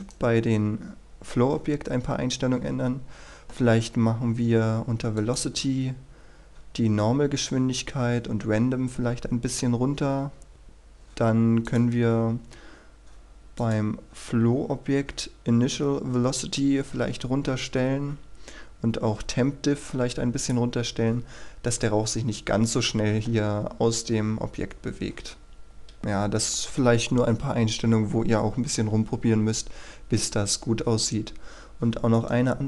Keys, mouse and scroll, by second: 0.1 right click, 4.1-5.3 scroll down 1, 5.3-14.8 drag, 18.8 click, 26.0 KP_3, 31.3-32.2 scroll down 1, 32.2 right click.